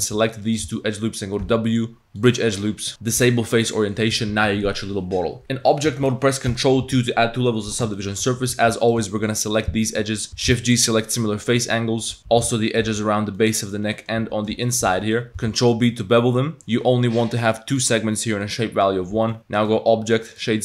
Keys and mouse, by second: 0.5 alt+shift+click, 0.8 middle click, 1.4 w, 2.9-3.7 drag, 3.8 click, 4.1 Tab, 5.4 Tab, 5.4 ctrl+2, 5.4 ctrl+0, 6.5 ctrl+2, 8.0 shift+click, 8.5 Tab, 8.5 2, 8.8 alt+click, 9.1 shift+click, 10.3 shift+z, 10.4 shift+g, 11.6 z, 12.2 z, 12.3 z, 12.7 alt+shift+click, 13.4 click, 13.4 z, 14.0 click, 14.5 shift+z, 15.2 click, 15.3 z, 15.4 ctrl+b, 16.6 click, 18.5 click, 19.2 Tab, 19.3 click, 19.7-20.4 drag.